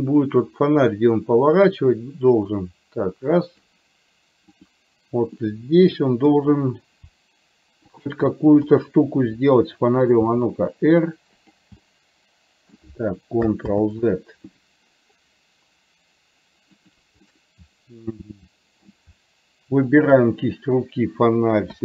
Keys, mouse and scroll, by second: 0.2-3.8 drag, 5.4-6.4 middle drag, 8.7 KP_7, 10.4 r, 11.9 middle click, 13.8 ctrl+z, 16.8 click, 17.4-18.9 middle drag, 20.0 shift+click.